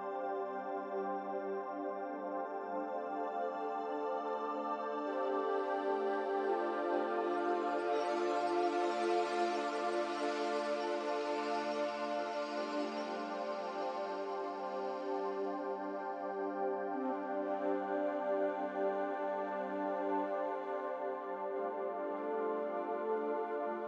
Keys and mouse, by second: 2.9 middle click, 4.4 shift+click, 9.6 shift+click, 10.8 3, 12.1 g, 14.4-14.9 middle drag, 15.9 click, 16.9-20.6 drag, 23.5 click.